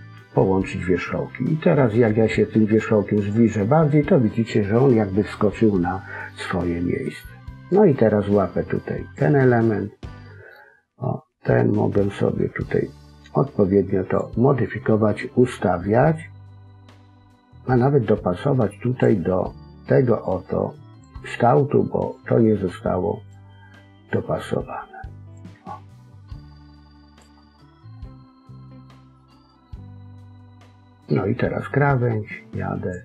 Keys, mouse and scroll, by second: 2.0 click, 4.6 middle click, 7.4 click, 9.6 middle click, 11.4 click, 14.3 scroll down 1, 14.6 middle click, 18.3 click, 20.2 click, 24.0 click, 25.6-26.1 scroll down 2, 25.8 middle click, 29.1 middle click, 29.8-31.0 scroll up 2, 31.0 click.